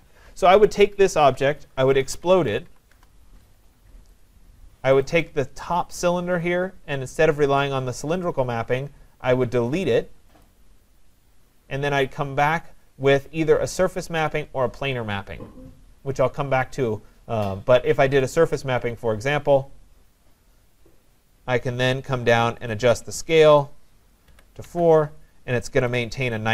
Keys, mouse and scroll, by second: 1.8-3.2 typing, 4.2 click, 5.1 click, 5.1 typing, 10.9-15.6 drag, 18.4-21.2 drag, 22.7 click, 24.3 4, 24.7 Tab, 26.0 click.